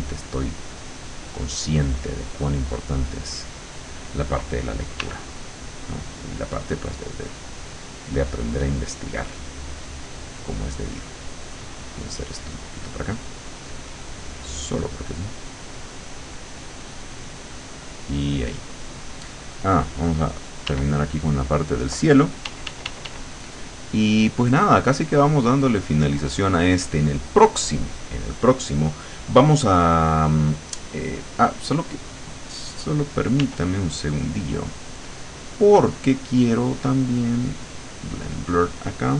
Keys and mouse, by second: 0.9-3.5 middle drag, 5.0 w, 6.4 click, 8.5 click, 9.5 click, 10.3 click, 10.8 click, 11.3 click, 12.6 click, 15.0-16.7 middle drag, 17.5-18.5 middle drag, 20.7 w, 22.5 d, 23.5-25.4 drag, 33.5 w, 37.1 click, 38.1 click.